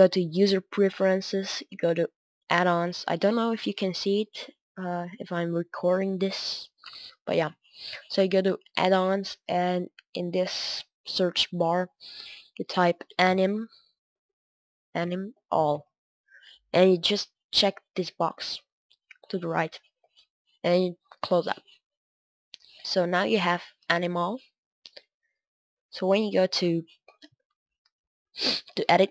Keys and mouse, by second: 26.5 Tab, 28.7 drag.